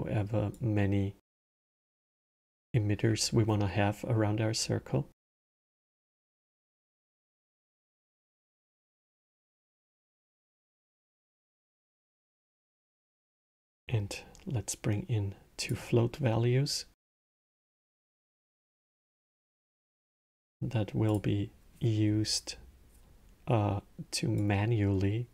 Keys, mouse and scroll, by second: 0.3-0.6 drag, 6.0 click, 11.1-13.3 middle drag, 13.3 shift+a, 17.5-18.1 middle drag, 18.1 click, 18.7 shift+d, 20.8 click, 24.1 click.